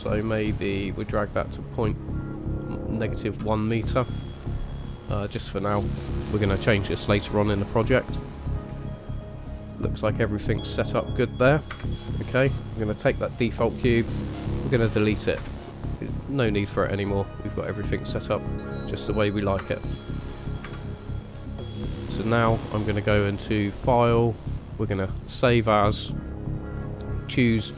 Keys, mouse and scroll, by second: 9.0 middle click, 11.7 KP_0, 13.4 click, 15.4 Delete, 16.9 middle click, 19.6 KP_0, 20.6 KP_1, 21.3 scroll up 2, 24.5 click.